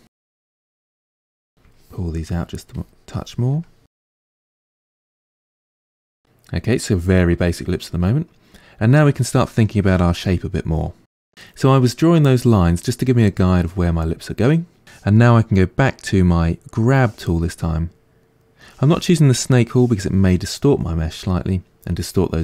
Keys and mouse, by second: 1.5 middle click, 2.2-3.7 ctrl+drag, 3.7 middle click, 4.1 ctrl+click, 4.9-16.8 middle drag, 16.8 click, 17.4-22.4 middle drag.